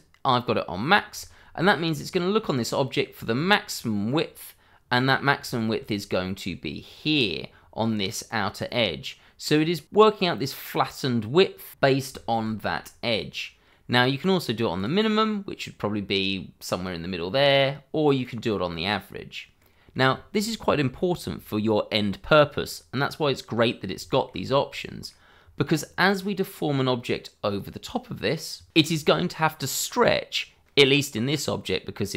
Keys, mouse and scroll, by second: 0.7 middle click, 1.2 shift+middle click, 1.5 middle click, 1.5-2.1 scroll up 1, 2.4 middle click, 3.2-3.5 scroll down 1, 4.9 middle click, 5.5 shift+middle click, 5.9 middle click, 6.4-6.9 scroll up 1, 6.9 middle click, 9.0-9.3 scroll down 1, 10.0 middle click, 12.2 scroll up 1, 12.5 shift+middle click, 13.0 middle click, 14.7 click, 16.7 middle click, 18.2 click, 19.6 middle click, 20.1 shift+middle click, 20.5 middle click, 24.1 shift+middle click, 24.4-24.7 scroll up 1, 24.7 middle click, 30.8 middle click.